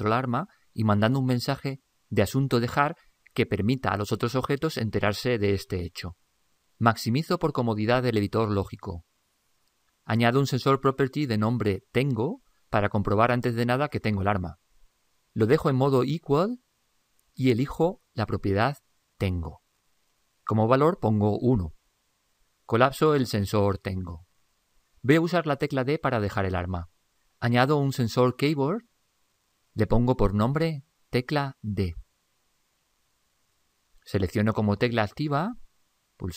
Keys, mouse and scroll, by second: 2.1-4.4 middle drag, 2.1-2.6 scroll up 1, 3.8-4.1 scroll up 1, 4.1-4.4 scroll down 2.